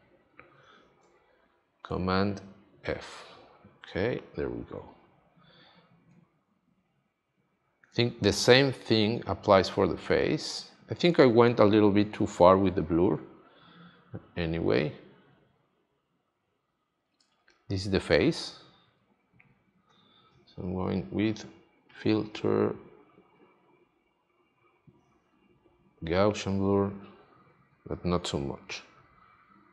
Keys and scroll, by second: 2.8 super+f, 7.8 space, 11.0 space.